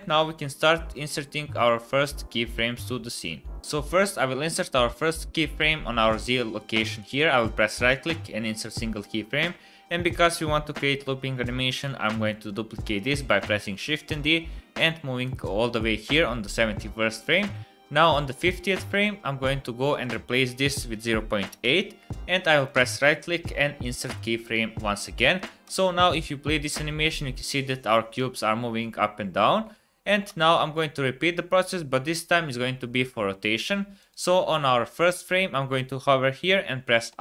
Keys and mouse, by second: 1.2 middle click, 1.3 click, 7.0-8.0 drag, 11.8-12.3 drag, 13.1 shift+d, 15.8 click, 18.3 click, 19.9-23.9 drag, 25.2 shift+middle drag, 25.6 space, 30.3 space, 30.7 click, 34.0 click, 37.1 i.